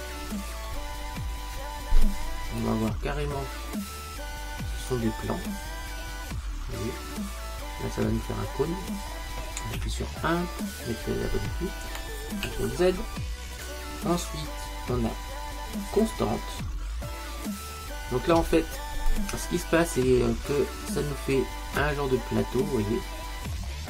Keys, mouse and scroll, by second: 0.3 ctrl+z, 2.7 click, 5.6-7.5 middle drag, 9.8 KP_1, 12.5 ctrl+z, 13.6 click, 17.5 click, 21.9 middle click, 22.5-23.8 middle drag.